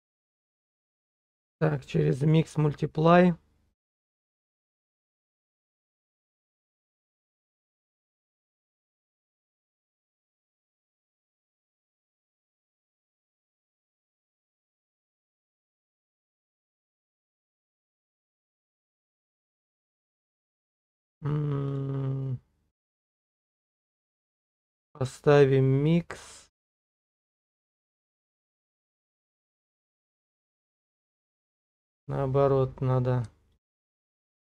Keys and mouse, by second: 3.8 click, 5.6 click, 7.1 click, 8.6 middle click, 9.7 click, 10.5 click, 13.5 middle click, 14.5 middle click, 15.4 shift+middle click, 16.2 shift+middle click, 16.6-18.4 middle drag, 19.5-21.9 drag, 25.9 middle click, 30.0-31.3 middle drag, 33.6 ctrl+click.